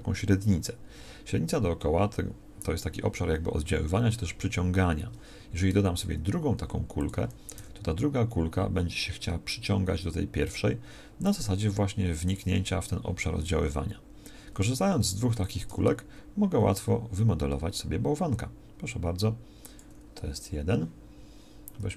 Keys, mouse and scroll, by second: 6.0 shift+a, 7.6 g, 14.8 s, 15.6 g.